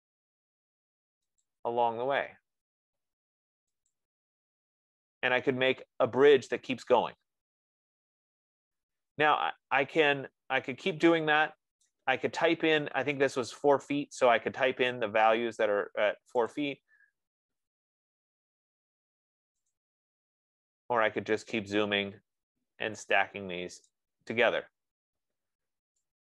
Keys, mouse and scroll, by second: 5.2 scroll, 6.7-7.4 scroll, 10.5-12.3 middle drag, 12.3-13.5 drag, 13.1 right click, 14.3 middle click, 14.5-15.4 scroll, 17.3 click, 17.7 middle click, 18.0 middle click, 18.8 middle click, 20.1 click, 21.0 middle click, 21.9 middle click, 24.3 click, 24.4 scroll, 25.1-25.9 scroll, 25.3 Escape, 25.9-26.3 scroll down 6.